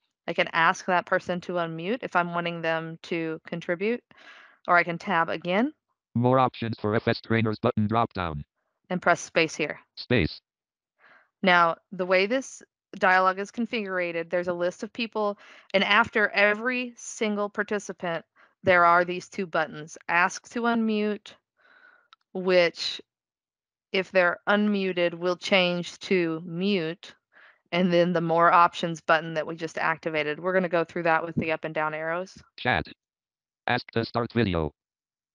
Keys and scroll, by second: 4.4 Tab, 9.1 space.